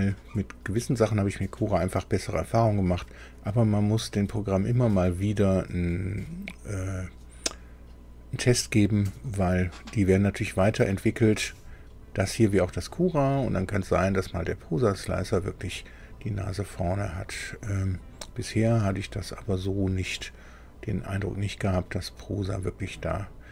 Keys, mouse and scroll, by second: 12.6-23.5 drag.